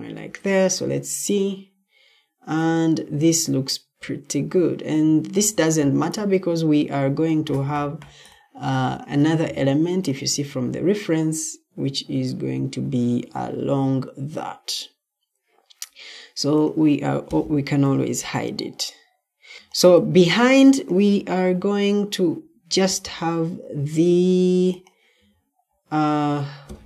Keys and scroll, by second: 21.2 Escape.